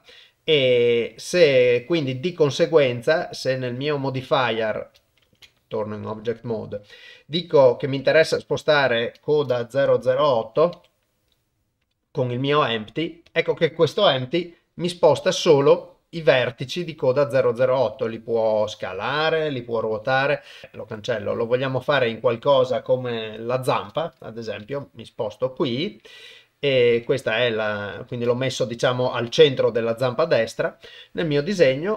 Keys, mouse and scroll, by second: 5.2 ctrl+Tab, 8.1-12.0 drag, 14.3 g, 17.9 s, 19.9 r, 24.6 g, 31.7 click.